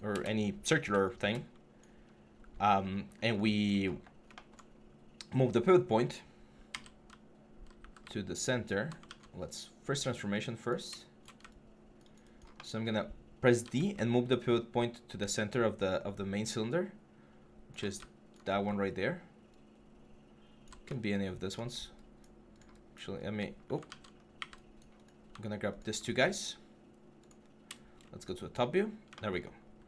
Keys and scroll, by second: 1.8 4, 6.5-8.8 typing, 13.4-20.4 typing, 23.6 ctrl+z.